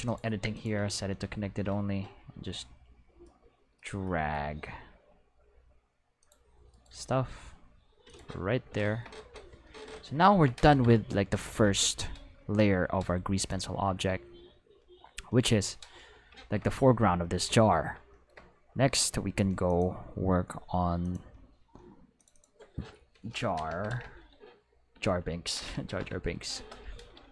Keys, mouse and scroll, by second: 0.1 click, 0.5 click, 1.2 g, 2.6-3.1 scroll down 1, 6.2 click, 6.7 right click, 6.9 g, 8.1 click, 9.2 Tab, 10.7 ctrl+s, 11.3 middle click, 13.4 click, 16.0 middle click, 19.7 click, 21.0 click, 22.2 click, 22.3 click, 23.6 shift+j, 23.7 shift+a, 23.9 shift+r, 24.9 Left, 25.5 Left, 25.7 a, 26.0 r, 26.5 space.